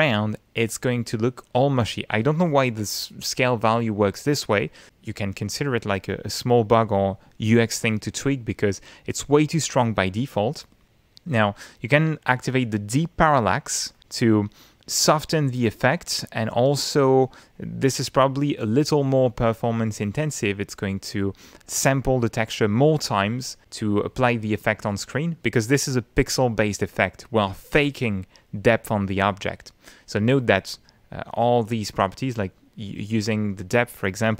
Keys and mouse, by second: 9.1-10.3 middle drag, 10.8 middle click, 14.6 click, 15.4-16.7 middle drag, 21.4 middle click.